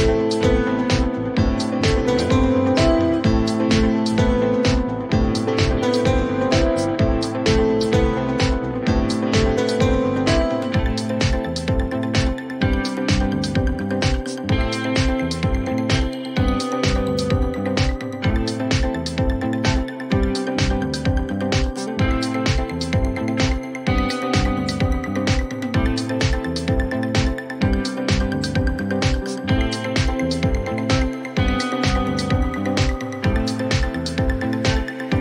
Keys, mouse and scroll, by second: 0.0 click, 0.7 p, 1.6 click, 2.3 ctrl+v, 4.4 click, 5.0 Delete, 6.8 click, 7.8 click, 11.6 click, 13.1-13.5 scroll, 15.0 click, 19.8-26.5 drag, 27.1 click, 28.7 click, 30.8 click, 31.1-31.9 typing, 32.7 Return, 34.0 click.